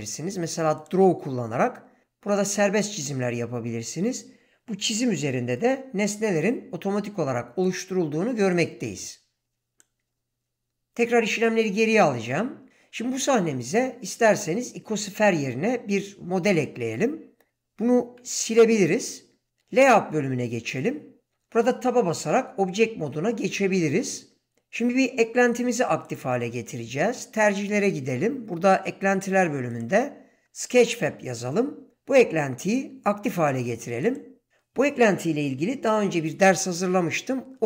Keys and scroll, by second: 18.5 x, 21.6 Tab, 30.4 typing.